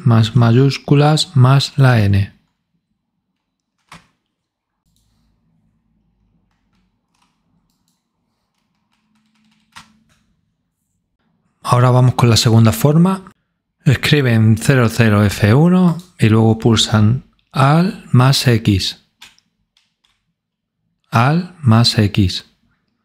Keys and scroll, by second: 13.3 Num_Lock, 20.8 space, 21.5 space, 21.7 x.